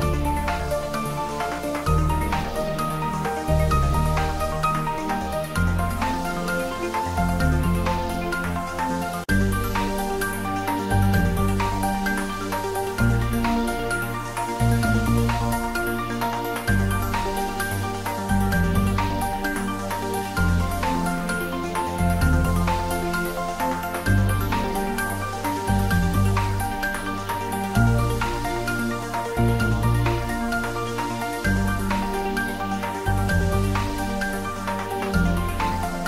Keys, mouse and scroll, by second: 0.2 click, 1.8 shift+middle click, 2.3-7.0 typing, 3.6 click, 4.5 click, 5.5 click, 6.2 click, 7.2 click, 8.2-10.4 typing, 11.2 click, 11.4 ctrl+s, 11.7-13.0 middle drag, 13.0 ctrl+middle click, 13.5 middle click, 14.1-15.7 typing, 16.3 click, 16.5 ctrl+s, 16.7-20.3 middle drag, 20.3 click, 23.2 shift+z, 24.9 middle click, 25.7 click, 29.7 ctrl+middle click, 30.8 r, 31.1 Down, 34.1 Return, 34.9 r, 35.1 Down, 35.6 Return, 35.7 ctrl+s.